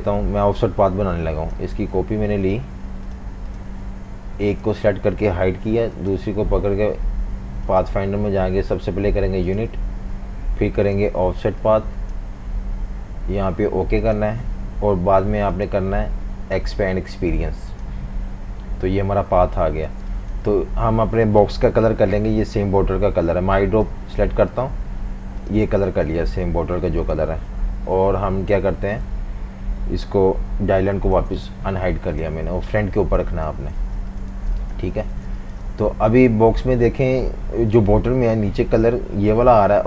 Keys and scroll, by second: 5.4 super+3, 20.0 space, 23.8 i, 26.1 typing, 28.4 alt+super+3, 31.2 shift+super+], 33.8 super+z, 34.4 v, 34.5 space, 35.1 v, 35.3 space.